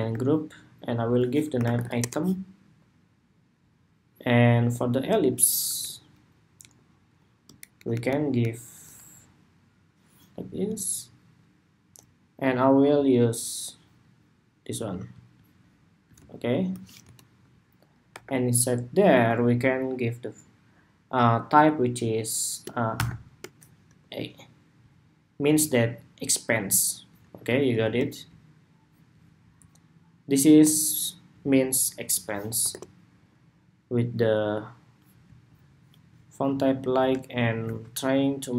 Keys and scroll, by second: 5.5 alt+Down, 6.4 alt+Down, 7.5 alt+Up, 16.7 alt+Left, 23.6 Escape, 27.5 ctrl+c.